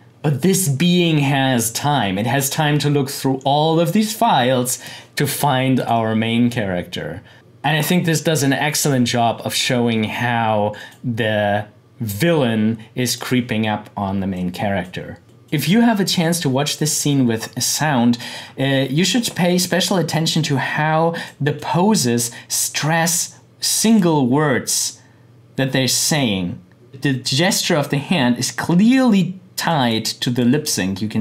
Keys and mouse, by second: 4.2-5.7 drag, 10.7 click, 13.3 click, 21.1-23.9 drag, 28.0 click, 29.7 click.